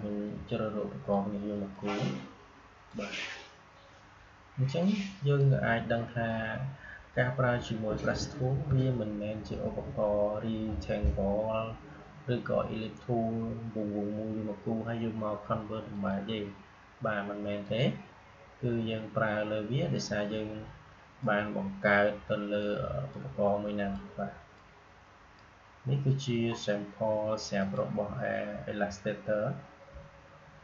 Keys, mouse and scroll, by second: 8.4 Delete, 15.8 click, 21.1-26.1 drag, 26.1-27.4 scroll down 1, 27.5 click.